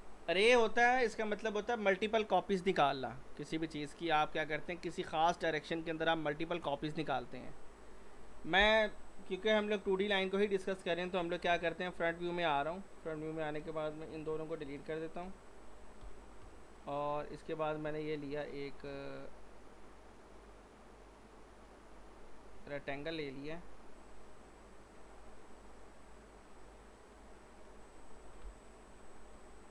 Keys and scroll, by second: 11.5 f, 11.9 z, 14.2 Delete, 15.2 z, 16.0 g, 16.4 z, 19.3 typing, 22.6 w, 28.4 p.